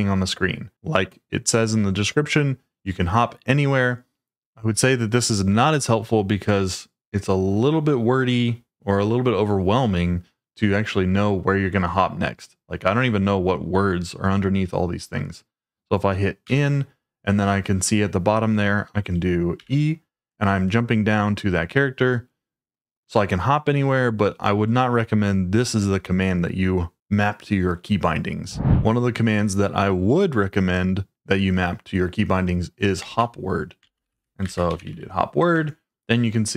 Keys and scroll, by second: 16.4 n, 19.5 e, 33.0-35.7 typing.